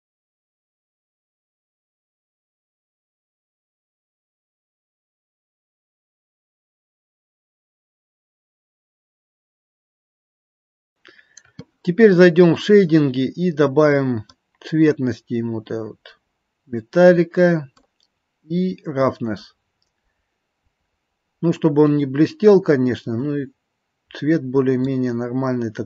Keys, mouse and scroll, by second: 0.8 click, 0.9 middle click, 1.1 scroll up 2, 1.5 click, 1.9 click, 2.2 click, 2.6 click, 2.9 click, 3.4 click, 3.8 click, 4.4 click, 5.0 click, 5.3 click, 5.8 click, 7.2 click, 7.2 f, 7.5 click, 7.8 click, 8.3 click, 8.9 click, 9.1 middle click, 9.4 scroll down 1, 9.7 click, 10.2 click, 10.4 middle click.